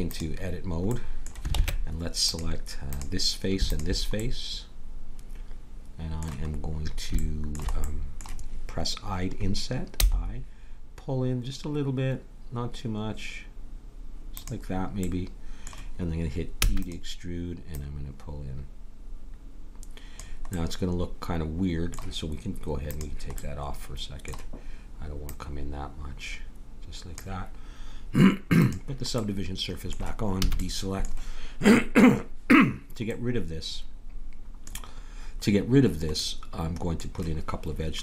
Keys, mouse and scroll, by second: 1.5 ctrl+Tab, 3.0-5.5 drag, 5.5 middle click, 9.9 i, 15.0-16.6 middle drag, 16.6 e, 17.7-19.6 drag, 20.5-22.6 middle drag, 22.8-24.7 drag, 23.4-24.8 middle drag, 25.2-27.0 drag, 28.5-30.4 drag, 30.4 a, 30.6 middle click, 33.1-34.9 middle drag, 36.4-38.0 middle drag.